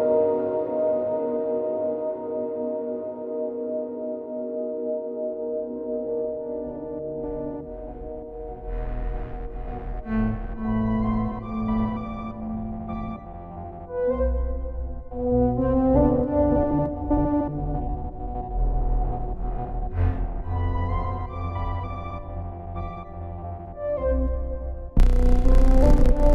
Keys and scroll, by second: 9.9 ctrl+u, 21.8 ctrl+t.